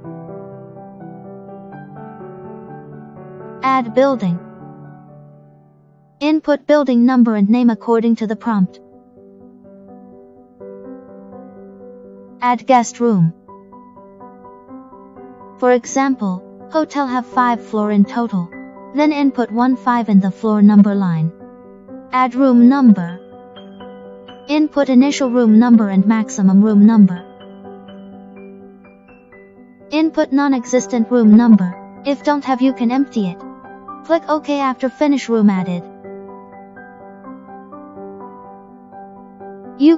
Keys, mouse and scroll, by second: 0.3 click, 1.4 click, 4.7 click, 7.7 Return, 15.4 click, 16.9 click, 23.4 click, 36.1 click, 37.5 click, 38.6 click.